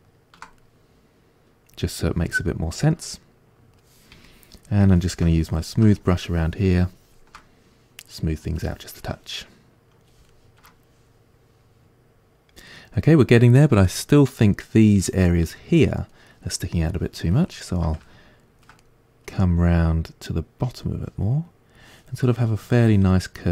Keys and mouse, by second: 4.3-5.4 shift+drag, 5.4 shift+middle click, 6.0-7.4 shift+drag, 7.4-8.6 middle drag, 8.6 shift+click, 9.3-20.0 middle drag, 20.0-23.5 drag.